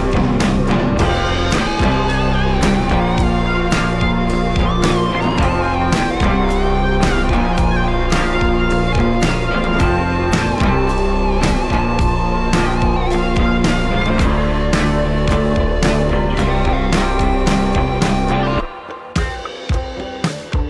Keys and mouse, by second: 0.0-1.7 typing, 0.4 ctrl+z, 0.9 shift+click, 1.9 Tab, 1.9 ctrl+z, 2.3 Tab, 2.5 click, 3.3 f, 3.7 click, 4.6 click, 5.2 click, 5.9 click, 6.5 ctrl+z, 6.5 click, 7.0 click, 7.7 click, 8.1 click, 8.3 ctrl+z, 8.3 f, 9.4 click, 10.0 click, 10.7 click, 11.5 click, 12.0 click, 13.0 click, 13.6 f, 14.0 click, 15.1 click, 15.5-17.3 drag, 17.4-19.5 drag, 19.7-20.6 drag.